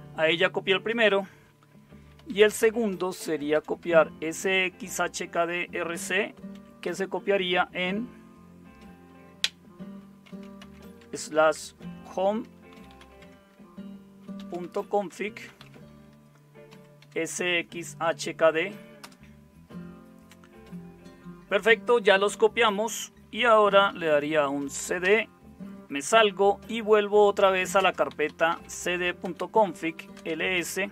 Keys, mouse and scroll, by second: 1.9-4.0 typing, 6.3 typing, 10.0-17.2 typing, 19.0 Tab, 23.5-24.4 typing, 25.0 Return, 27.3-30.5 typing, 29.2 Return.